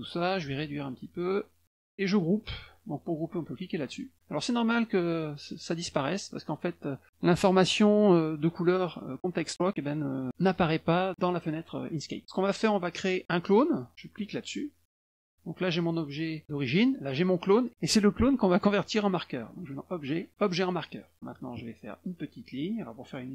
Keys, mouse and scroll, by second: 0.8-1.9 ctrl+shift+drag, 3.9 click, 11.1 click, 14.2 click, 14.9 click, 15.8 click, 17.2 click, 19.6 click, 20.6 click.